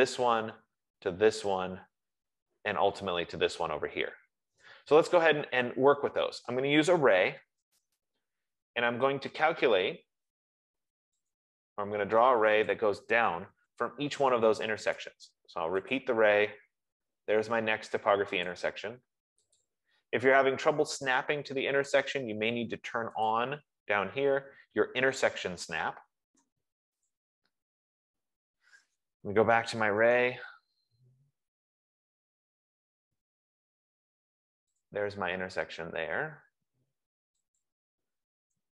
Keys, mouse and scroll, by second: 5.8 middle click, 6.0-6.7 scroll down 1, 6.7 Escape, 6.7-7.7 scroll down 1, 7.2-8.2 typing, 7.7-8.0 scroll, 11.6 click, 13.1 click, 15.4 Return, 15.4 right click, 16.5 click, 18.9 click, 20.0 click, 23.6 Return, 23.6 click, 27.6 click, 29.5-30.7 typing, 34.1 F15, 35.2 click, 37.8 click.